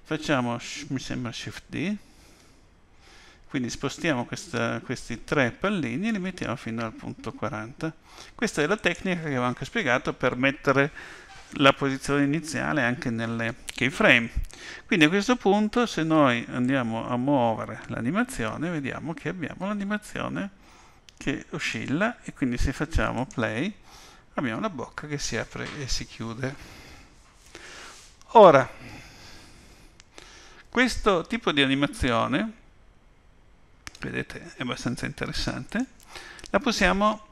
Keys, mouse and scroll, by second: 2.0 shift+d, 16.6 click, 23.1 click, 35.7 click, 36.8 click.